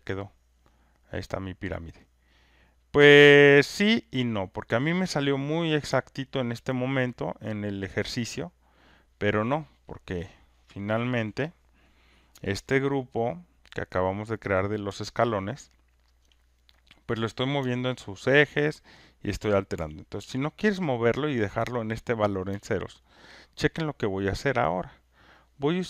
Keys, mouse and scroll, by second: 3.3 alt+click, 4.6 alt+right click, 8.8 click, 14.6 click, 16.2 alt+click, 19.0 click, 23.4 alt+right click, 24.7 click.